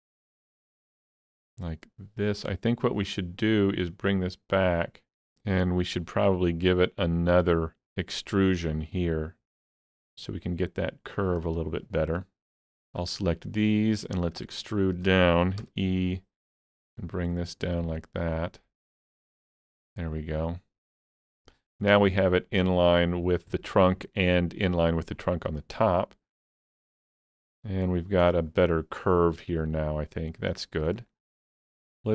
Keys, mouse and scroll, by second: 11.1-12.7 shift+drag, 12.7 shift+click, 14.6-27.4 shift+middle drag, 15.6 e, 27.4 alt+z, 27.8-32.1 middle drag, 31.2 scroll up 1.